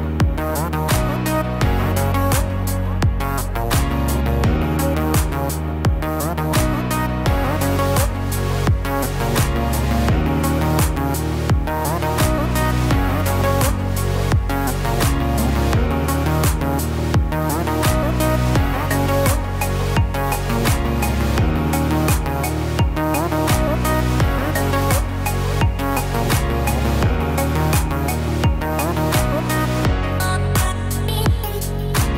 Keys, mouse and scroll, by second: 2.5 Tab, 3.1-3.8 scroll down 2, 3.8 click, 3.8-5.6 scroll down 1, 6.2 g, 9.2 click, 10.8 g, 17.4 Tab, 19.6 click, 24.0 click, 25.6 click, 27.5 click, 28.3-28.8 scroll down 8, 29.0-30.3 scroll up 2, 30.3 Tab, 30.3 scroll up 2, 30.8-31.4 scroll up 3.